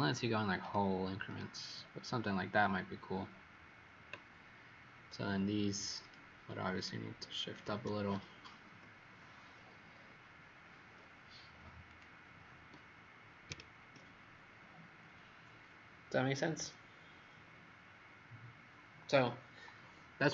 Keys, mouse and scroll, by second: 1.2 click, 5.9 click, 6.7 shift+click, 7.4 click, 8.6 Up, 9.1 Up, 9.4 Up, 11.8 click, 13.4 ctrl+0.